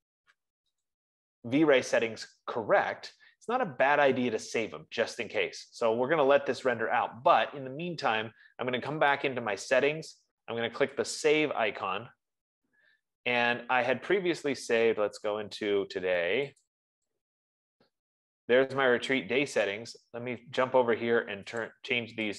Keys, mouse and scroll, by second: 6.4 click, 9.7 click, 11.6 click, 17.1 click, 20.2 click, 22.1 click.